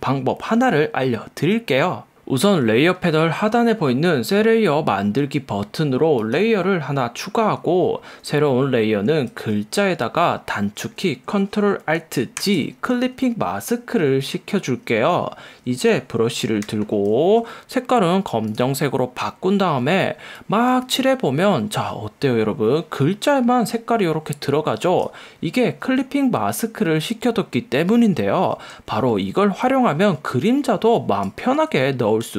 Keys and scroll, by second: 16.9 b, 29.4 super+z, 31.8 super+z.